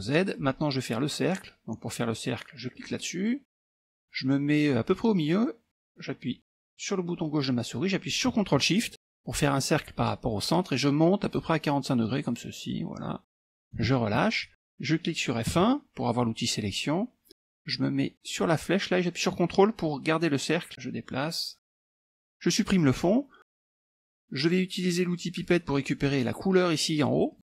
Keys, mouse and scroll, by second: 2.8 click, 5.8-13.8 drag, 15.6 F1, 18.4-21.7 drag, 21.7 ctrl+scroll up 1, 21.8 ctrl+click, 22.0 click, 22.9 click, 25.5 click, 27.4 click.